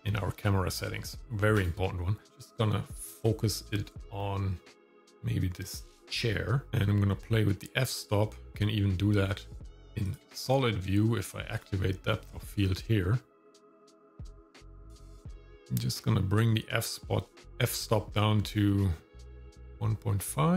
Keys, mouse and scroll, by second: 0.0 click, 0.7 click, 1.2-1.6 scroll down 1, 1.6 click, 6.7-8.5 shift+drag, 10.0-12.1 drag, 13.4 click, 14.0-14.7 scroll down 3, 15.3-20.5 shift+drag.